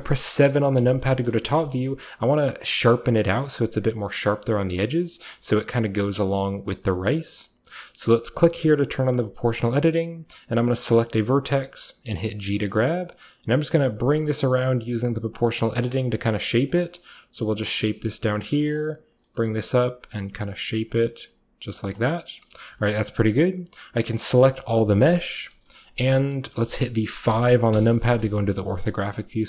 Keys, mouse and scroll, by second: 0.4 KP_7, 1.3-3.1 shift+middle drag, 1.3-3.1 shift+scroll up 1, 5.6 click, 8.8 click, 12.0-13.0 scroll up 1, 13.0 click, 13.0-13.7 scroll up 1, 13.7-14.3 scroll up 1, 14.4 click, 15.0 g, 15.9 g, 16.3-17.5 scroll up 1, 16.7 click, 17.5-20.1 scroll up 1, 17.7 g, 18.7 click, 19.1 middle click, 19.2 g, 19.5 click, 20.3 g, 20.5-21.4 scroll up 1, 21.4-22.7 scroll down 2, 21.4 typing, 21.8 click, 22.7 typing, 23.1-23.6 scroll up 1, 23.3 middle click, 23.6 scroll down 1, 23.7-25.4 scroll up 1, 24.0-25.4 middle drag, 24.3 a, 25.4-26.5 scroll up 1, 25.4 KP_5, 26.5-27.3 scroll up 1, 26.7-28.4 shift+middle drag, 27.3-29.4 shift+scroll up 1, 27.3 KP_5, 28.6 shift+middle click, 28.9 shift+middle click, 29.2 shift+middle click.